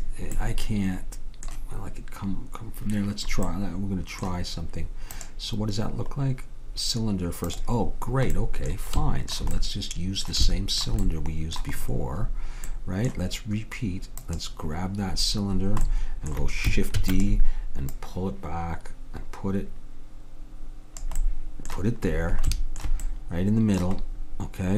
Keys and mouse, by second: 0.4-3.2 middle drag, 3.5 middle click, 14.3-16.1 drag, 17.1 shift+d, 17.9-19.8 drag, 21.3-24.2 middle drag.